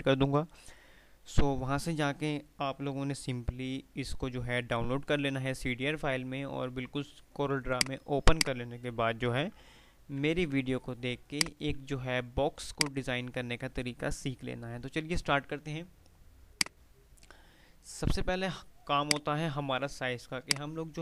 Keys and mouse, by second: 7.8 click, 9.2 F3, 9.6-11.3 typing, 10.5 F3, 11.5 click, 12.5 F2, 12.8 click, 13.1 F2, 16.6 click, 16.9 F3, 19.2 ctrl+click, 20.9 F2.